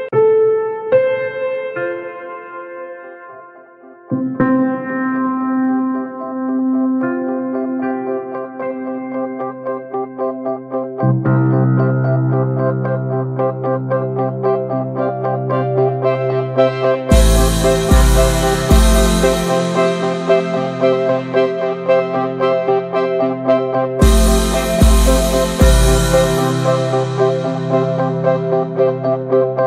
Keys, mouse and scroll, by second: 0.1-0.5 scroll up 2, 0.5 click, 2.0 alt+z, 2.3 alt+z, 2.5 shift+middle click, 2.8 click, 3.2 scroll up 1, 3.5 alt+z, 3.6 click, 4.2 scroll down 3, 4.4 alt+z, 4.7-5.3 middle drag, 5.3 scroll up 1, 5.4 drag, 5.6 middle drag, 5.9 Tab, 6.0 drag, 6.2 middle click, 6.5 alt+z, 6.6-7.1 drag, 7.1 right click, 7.5 click, 7.8 ctrl+1, 8.0 ctrl+2, 8.1 click, 8.5 alt+middle drag, 8.7 ctrl+s, 8.8 drag, 8.9 scroll down 1, 9.2 middle click, 9.4 drag, 9.6-10.6 middle drag, 10.6-12.6 scroll up 5, 10.8 ctrl+s, 10.9 shift+middle click, 11.2 Tab, 11.4 alt+middle click, 11.5 alt+middle click, 11.7 alt+z, 12.0 shift+middle click, 12.6 ctrl+r, 15.1 shift+middle click, 15.2-15.8 scroll up 1, 15.8 ctrl+r, 16.5 alt+z, 16.7 scroll down 3, 17.0 Tab, 17.2 shift+middle click, 17.4-18.5 scroll up 3, 17.9 shift+middle click, 18.5 click, 19.0-19.3 shift+middle drag, 19.3-20.2 drag, 20.2 ctrl+z, 20.7 shift+middle click, 21.7 click, 22.4 r, 23.9 alt+z, 24.1 shift+middle click, 24.6 ctrl+b, 28.3-29.6 drag.